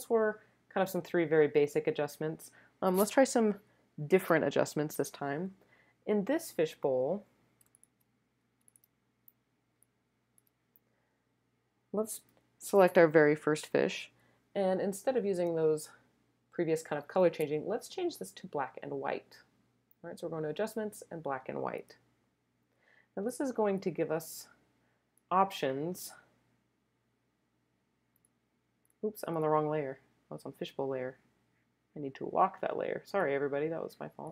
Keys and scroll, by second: 7.7 super+space, 8.6 space, 9.8 space, 10.2 space, 10.3 space, 10.4 space.